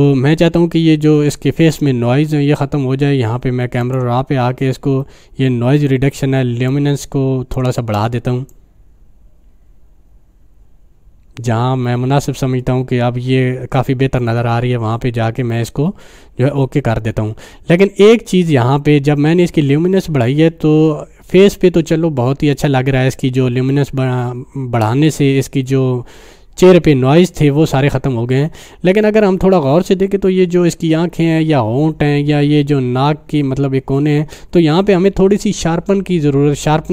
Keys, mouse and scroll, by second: 3.8 click, 6.7-7.3 drag.